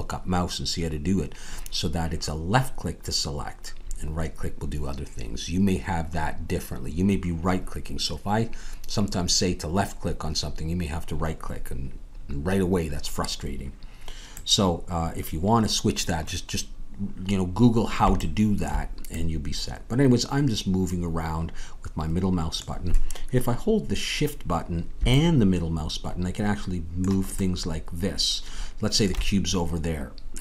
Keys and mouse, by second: 17.7-30.4 middle drag.